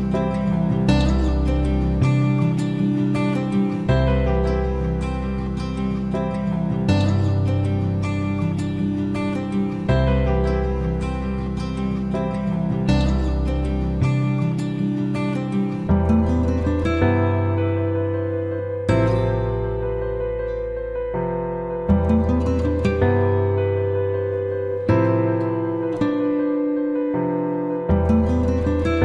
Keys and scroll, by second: 8.3 ctrl+x, 9.8 ctrl+f.